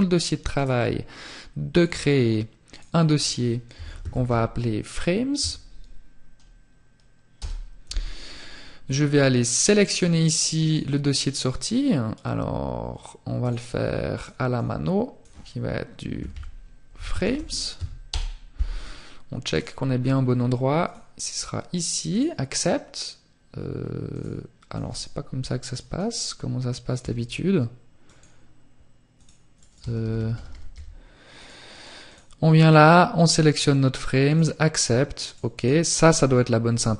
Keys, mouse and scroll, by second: 11.8 click, 20.5 click, 32.6 click.